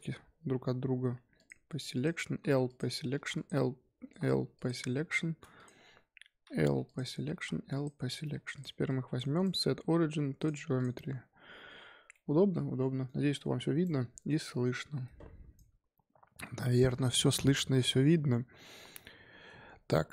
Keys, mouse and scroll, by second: 0.6 l, 1.1 p, 1.9 click, 2.2-4.3 typing, 3.3 click, 5.5 click, 6.4 l, 6.7 p, 7.3 l, 7.6 p, 8.2 Tab, 8.5 click, 8.8 click, 9.3-10.7 right drag, 10.7 click, 11.7-12.1 scroll down 1, 12.1-15.2 middle drag.